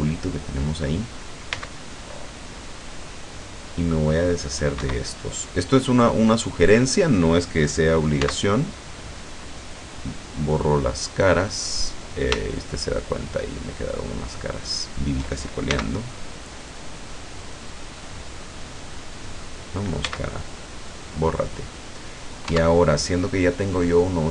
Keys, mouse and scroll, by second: 0.0-1.0 middle drag, 1.6 c, 2.0-4.8 drag, 4.8 Escape, 5.2-6.9 middle drag, 6.9 click, 8.3 x, 10.7 click, 12.5 shift+right click, 13.0 shift+right click, 13.4 shift+right click, 14.5 shift+right click, 15.0 shift+right click, 15.8 x, 16.0 click, 16.6 right click, 17.0 right click, 17.8-18.3 scroll up 1, 18.8 right click, 19.3 right click, 20.1 x, 20.4 click, 20.9-21.2 scroll down 1, 21.8 middle click, 22.6 Tab.